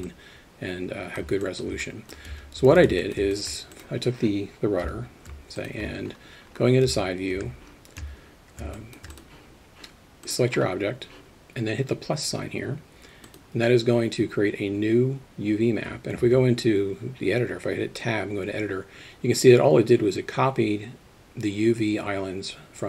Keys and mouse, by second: 0.1-1.2 middle drag, 1.5 alt+shift+middle drag, 1.8 alt+middle click, 2.3 Tab, 2.7 alt+a, 3.0 alt+middle click, 3.3 alt+shift+middle drag, 4.8 KP_3, 5.6 alt+shift+middle drag, 6.9 Tab, 7.3 a, 8.1 Tab, 8.8 alt+shift+middle drag, 13.3 click, 16.2 Tab.